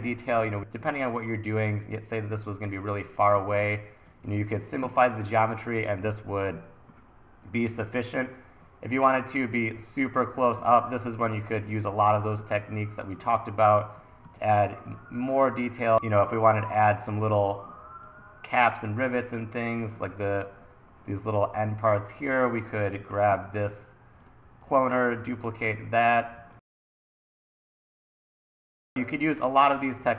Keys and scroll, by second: 0.1 super+s, 3.4 1, 4.7 super+s, 6.1 super+r, 10.6 1, 14.3 1, 25.3 t, 26.4 1, 30.0 t.